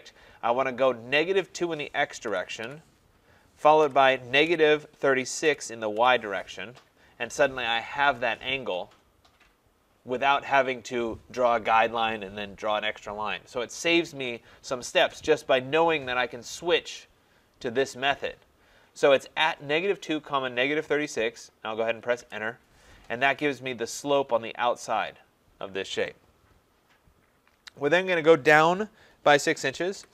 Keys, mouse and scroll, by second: 2.1-6.0 typing, 22.2 Return, 30.0 6.